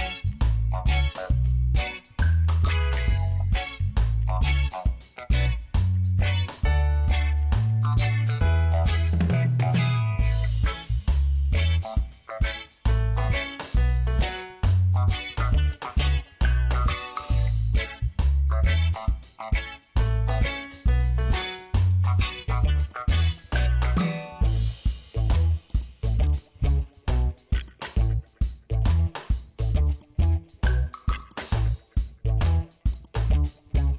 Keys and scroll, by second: 0.2 ctrl+d, 0.3 space, 1.1 ctrl+d, 1.1 space, 2.3 ctrl+d, 2.4 space, 2.9 ctrl+d, 3.0 space, 4.1 ctrl+d, 4.6 ctrl+d, 4.7 space, 5.6 ctrl+s, 5.8 ctrl+d, 5.9 space, 6.7 ctrl+d, 7.2 ctrl+d, 7.2 space, 7.8 ctrl+d, 8.2 ctrl+d, 8.3 space, 9.0 ctrl+d.